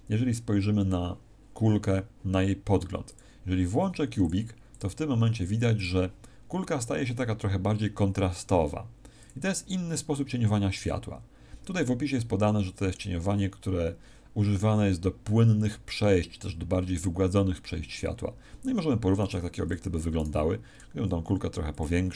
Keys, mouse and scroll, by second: 3.0 click, 4.1 click, 9.1 click, 19.1 right click, 19.5 x, 20.1 right click, 20.7 s, 21.7 click.